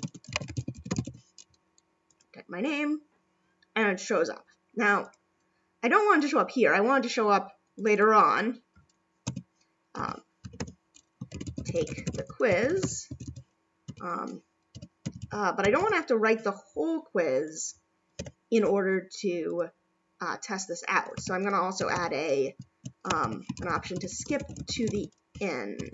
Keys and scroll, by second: 10.4 [, 13.9 [, 15.0 ], 25.8 [.